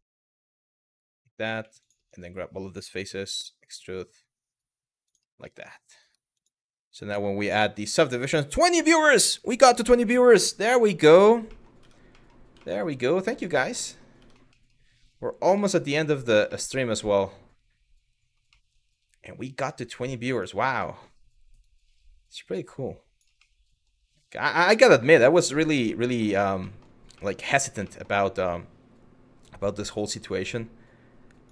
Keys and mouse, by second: 0.5 click, 2.7 e, 4.7 click, 5.1 middle click, 5.7 Tab, 6.0-7.9 drag, 11.2 middle click, 11.5 Tab, 11.9 middle click, 12.3 middle click, 13.0 middle click, 13.3 middle click, 13.8 Tab, 14.2 middle click, 15.3 middle click, 16.1-18.0 middle drag, 18.1 middle click, 20.0 click, 20.5 middle click, 21.3 click, 23.1 middle click, 24.6 click, 25.9 middle click, 26.3 shift+middle click, 26.8 shift+middle click, 27.6 shift+middle click, 29.9 click, 31.4 shift+middle click.